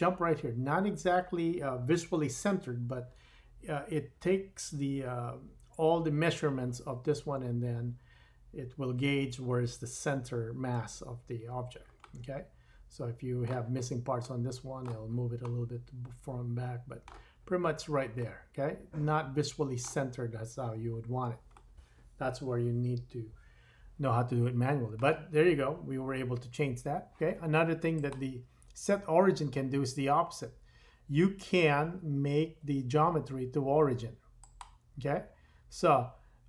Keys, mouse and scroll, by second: 12.6-13.4 middle drag, 13.4 click, 13.5 middle drag, 13.8-14.3 drag, 14.3 middle click, 14.4 click, 14.5 middle click, 14.6 click, 14.7 middle click, 14.7-16.1 drag, 15.5 middle click, 16.1-17.3 middle drag, 17.3-18.2 drag, 18.2-24.1 middle drag, 24.7-36.4 drag.